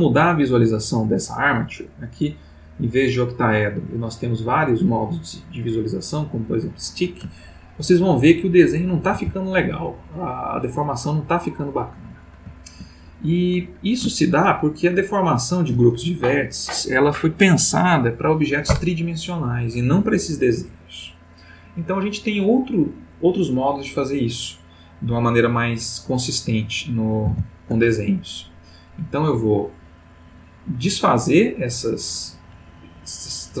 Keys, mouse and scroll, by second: 2.5 click, 4.6 click, 7.3-8.2 ctrl+middle drag, 9.1 r, 13.1 ctrl+Escape, 14.2-15.2 ctrl+middle drag, 27.3 alt+r, 28.5 click.